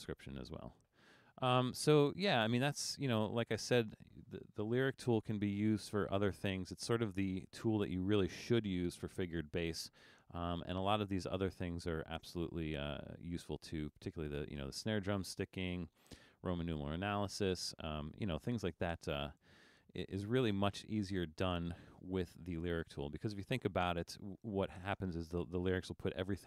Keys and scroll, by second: 5.1 super+-, 5.7 super+-, 6.5 super+-.